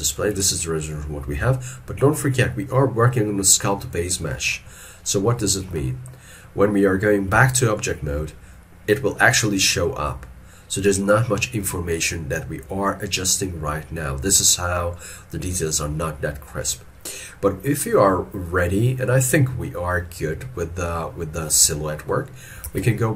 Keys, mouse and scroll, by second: 4.3 middle click, 4.8 scroll down 1, 5.4 scroll down 1, 5.5 shift+middle click, 7.3 scroll, 7.4 ctrl+Tab, 17.3 middle click, 22.7 ctrl+Tab.